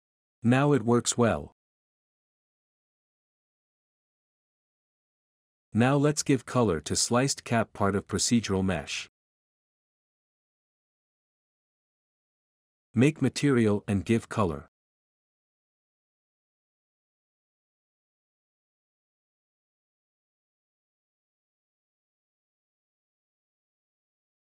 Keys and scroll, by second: 0.0-1.5 typing, 2.5-4.8 typing, 3.3 Escape, 6.9-11.2 typing, 14.3-15.6 typing, 16.9 typing, 19.2-20.7 typing.